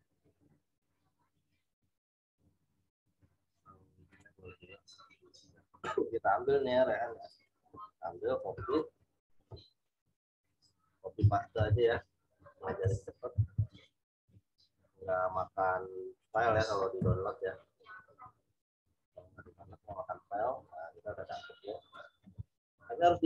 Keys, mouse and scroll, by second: 1.8-2.6 scroll down 2, 4.1 click, 7.3 right click, 8.7 click, 11.5 ctrl+v, 13.3 ctrl+t, 14.4 alt+shift+click, 16.9 Return, 18.2 v, 19.1 click, 22.2 z, 22.5 click.